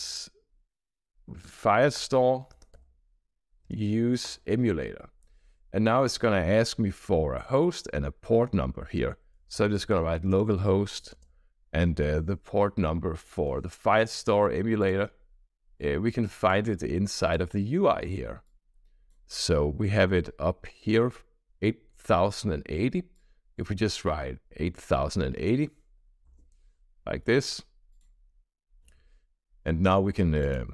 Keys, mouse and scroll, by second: 0.0-4.2 typing, 2.4 Return, 9.0-11.1 typing, 15.1 click, 15.7 click, 17.1 click, 18.4 click, 19.4-20.6 scroll up 3, 23.0-23.6 drag, 24.7 click, 25.9 8, 26.2 0, 27.8 click, 28.7 shift+;, 30.4 click.